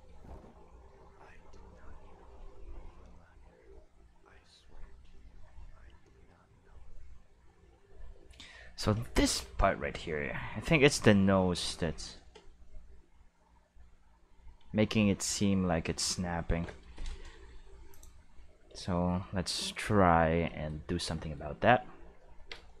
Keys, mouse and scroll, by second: 8.1 space, 17.9 click, 19.6-21.5 middle drag, 22.4 Tab.